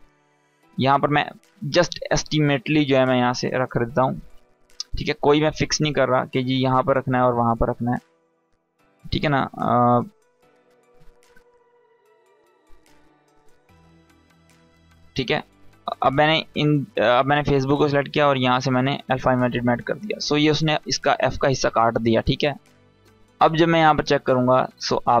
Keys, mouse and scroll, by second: 1.7-2.2 scroll up 1, 2.2 space, 2.2-2.8 click, 2.7 space, 3.5-4.2 scroll up 1, 4.2-5.1 space, 5.8 ctrl+z, 7.2 ctrl+z, 7.8 space, 7.9 click, 8.2 space, 8.3 click, 8.5 space, 9.2-10.1 drag, 10.8 Up, 16.3 click, 19.2-20.0 scroll down 1, 20.0 space, 20.1-20.7 click, 20.5 space, 22.5 click, 24.8-25.2 scroll up 1.